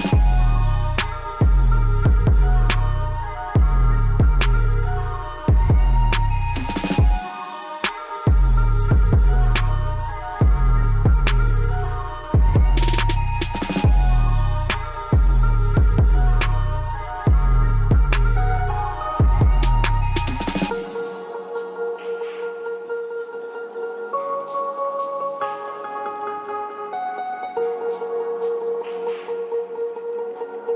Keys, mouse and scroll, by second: 1.7 scroll down 1, 3.2 scroll up 1, 3.8 scroll down 1, 4.9 scroll up 1, 5.6-10.5 drag, 10.5 scroll down 1, 12.6 click, 13.6-14.0 scroll down 1, 14.0 scroll up 1, 14.2 scroll down 1, 15.0 click, 15.4 scroll up 1, 19.7-25.5 drag, 25.5 click, 27.7-30.7 drag.